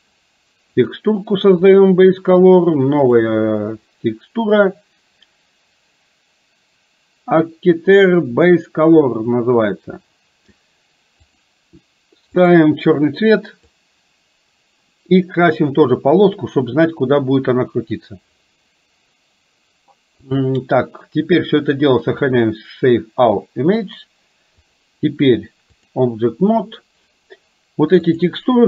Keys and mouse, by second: 0.8-3.3 drag, 11.2 click, 13.8-15.2 drag, 20.3 click, 22.3 click, 24.7-26.1 drag.